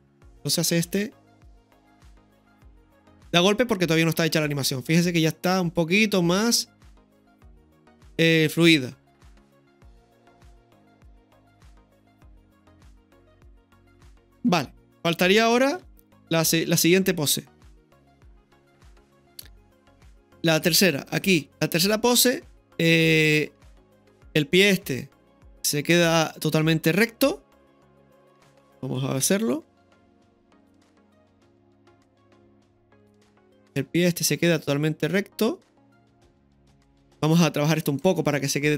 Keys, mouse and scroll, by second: 0.4 click, 0.6 space, 11.9-15.1 middle drag, 15.7 KP_3, 16.7 ctrl+KP_3, 18.2 scroll down 1, 18.9-19.4 scroll down 1, 18.9 space, 19.4-19.8 scroll up 1, 20.0 shift+middle click, 21.1 click, 23.7-24.9 drag, 24.9-25.2 scroll down 1, 25.2-29.2 middle drag, 29.2 KP_3, 29.8 ctrl+KP_3, 31.3-31.9 scroll up 1, 31.9 scroll up 1, 32.0-32.6 shift+middle drag, 34.3-36.2 drag, 36.9-37.8 scroll down 1, 37.6-38.4 typing, 37.8 scroll down 1, 37.9 right click.